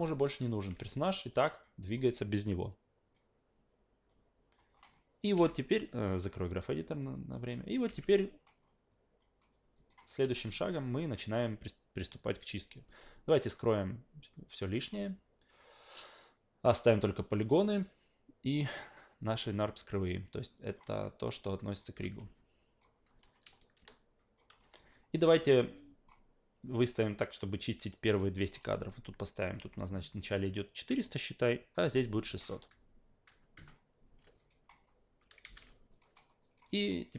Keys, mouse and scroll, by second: 0.2 alt+right click, 0.5 alt+middle click, 0.7 alt+v, 1.4 alt+click, 1.8 alt+right click, 2.0 alt+middle click, 2.6-3.1 alt+drag, 4.1 alt+click, 4.8 alt+middle click, 6.2 click, 7.1 alt+click, 7.6 alt+middle click, 7.9 alt+v, 8.0 alt+right click, 8.4 alt+middle click, 8.9 alt+click, 9.7 alt+right click, 10.3 alt+v, 13.6 click, 14.8 click, 15.5 click, 16.6 click, 17.4 click, 18.5 click, 20.0-20.7 alt+drag, 21.7 click, 21.9 f, 22.3 alt+right click, 23.2-24.4 alt+drag, 25.8-26.1 drag, 28.4 click, 31.6 click, 34.4 alt+right click, 34.7 alt+middle click, 35.4 f, 35.9 alt+right click, 36.1 alt+middle click, 36.4 alt+right click, 36.7 alt+click.